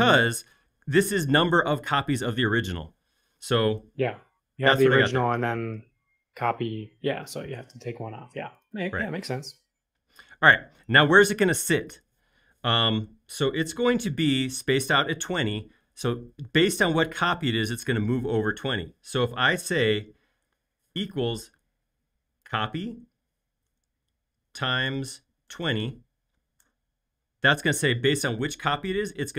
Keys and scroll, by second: 21.1 typing, 23.8 typing, 24.9-26.1 typing, 26.6 Return.